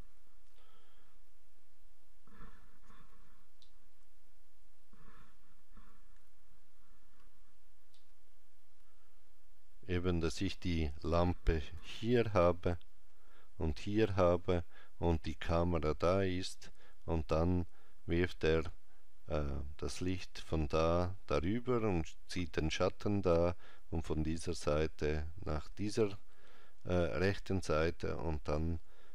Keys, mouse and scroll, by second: 1.2 scroll down 1, 2.5 scroll down 2, 3.5 middle click, 6.0 KP_5, 7.8 middle click, 8.5 scroll down 3, 10.5 scroll down 4, 11.6 KP_5.